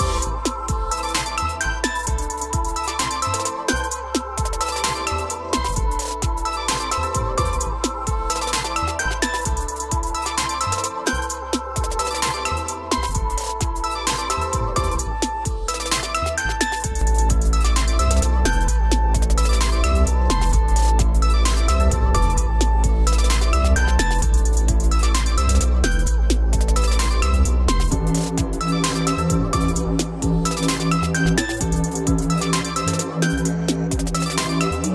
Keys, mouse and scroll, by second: 0.8-1.8 typing, 3.7-6.2 typing, 7.1 Return, 9.1 click, 9.3 click, 10.0 p, 11.2-12.0 typing, 11.3 click, 13.1 Escape, 13.4 Escape, 13.8 click, 14.0 click, 14.2 click, 14.6 right click, 16.3 click, 18.0 click, 20.2-21.0 scroll, 23.6 click, 25.4 F3, 26.1-27.1 scroll, 27.1 m, 27.5 click, 29.5-29.9 typing, 31.9 click, 33.7 click, 34.1-34.7 scroll down 7, 34.7-34.9 scroll up 7.